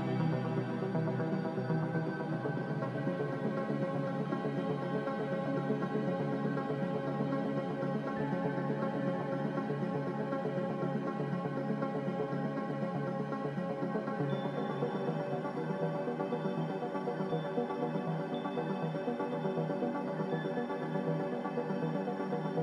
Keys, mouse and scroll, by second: 0.4 typing, 0.6 Return.